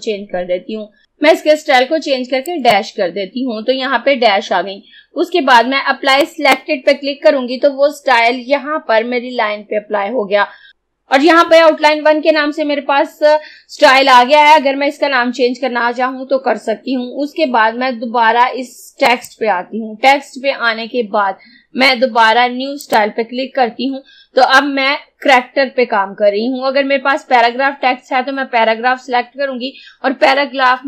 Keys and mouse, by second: 2.6 click, 6.3 click, 19.2 click, 22.8 click.